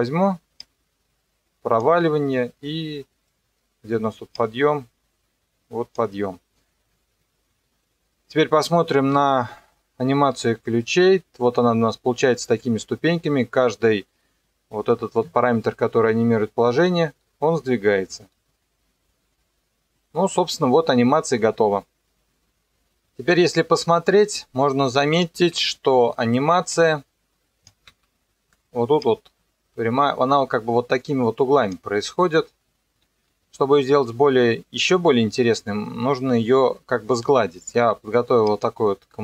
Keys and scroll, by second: 9.1 u, 15.2 KP_0, 27.9 ctrl+2, 35.2 Escape.